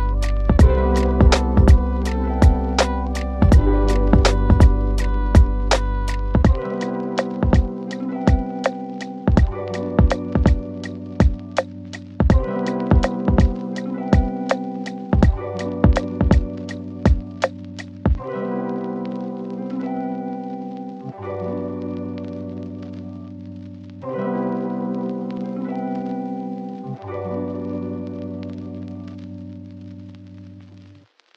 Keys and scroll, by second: 4.3 f, 5.6 d, 7.4 ctrl+shift+a, 12.0 f, 13.3 d, 15.3 f, 20.0 F4, 20.4 F9.